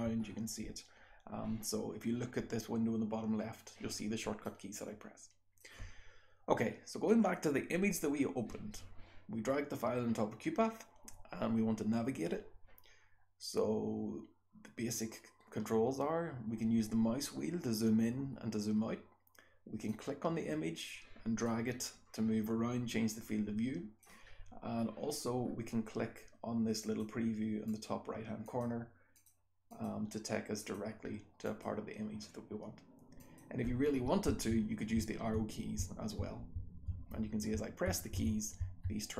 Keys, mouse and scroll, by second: 0.2-1.6 scroll down 2, 1.6-3.4 scroll down 1, 3.4-4.4 scroll down 1, 4.4-5.6 drag, 4.4-5.6 scroll down 1, 5.6-16.5 scroll down 1, 16.5-17.4 scroll up 2, 17.4-18.3 scroll down 2, 18.3-20.9 scroll down 1, 19.9-20.9 drag, 20.9-21.4 scroll down 1, 21.4-24.0 drag, 21.4-23.7 scroll down 1, 23.7-24.3 scroll down 1, 24.3-25.5 scroll up 2, 25.5-26.2 scroll down 2, 26.2-26.8 scroll down 1, 26.8 click, 26.8-27.7 scroll down 1, 27.7 click, 27.7-28.5 scroll down 1, 28.5 click, 28.5-30.6 scroll down 1, 29.2 click, 29.7 click, 30.6 click, 30.6-31.5 scroll down 1, 31.5 click, 31.5-33.2 scroll down 1, 33.2 click, 33.2-39.1 scroll down 1, 34.3 Right, 35.0 Right, 35.8 Left, 36.6 Down, 37.6 Up, 38.2 Up, 38.6 Left.